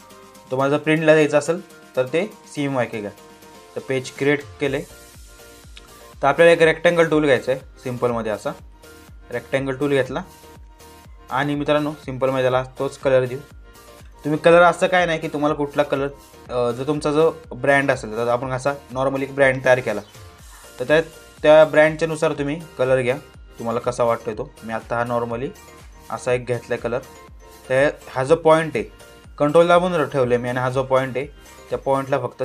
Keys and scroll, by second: 14.6 ctrl+t.